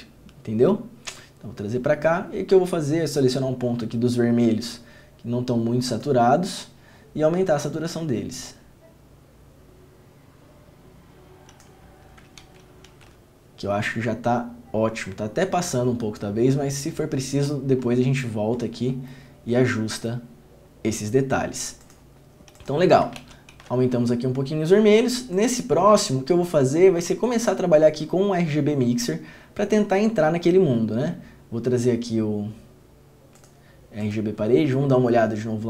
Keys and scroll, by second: 12.6 ctrl+d, 13.1 ctrl+d, 23.4 ctrl+d, 23.7 ctrl+d.